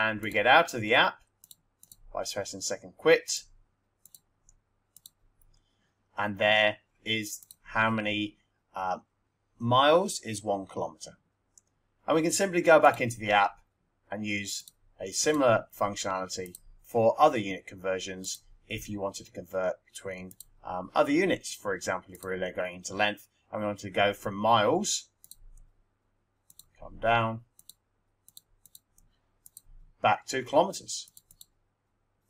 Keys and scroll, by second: 7.4 Return, 14.5 Up, 15.1 Up, 16.3 Return, 18.3 Return, 20.2 2, 22.1 1, 26.5 Down, 28.3 Right, 29.1 Return, 31.0 Left.